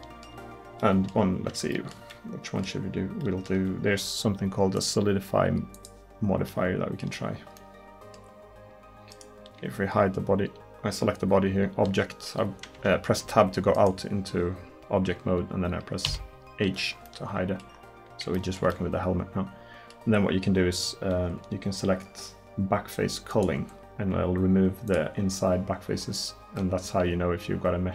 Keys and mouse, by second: 12.8 Tab, 13.3 Tab, 16.1 h, 26.6 middle drag, 27.8 drag.